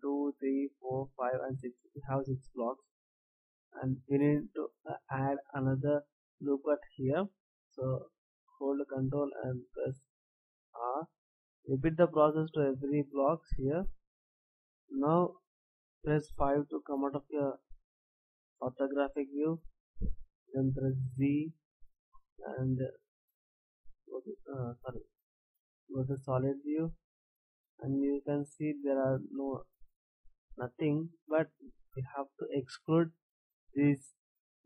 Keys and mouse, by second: 3.0-5.0 middle drag, 6.5-10.0 middle drag, 11.2 middle click, 14.5 a, 21.0 z, 24.6 z, 25.1 z.